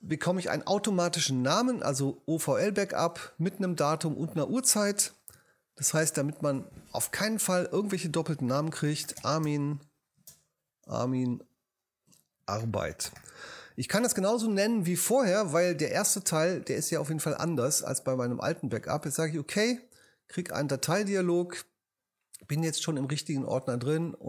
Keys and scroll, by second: 5.7 shift+-, 8.6-10.2 typing, 11.9-13.7 typing.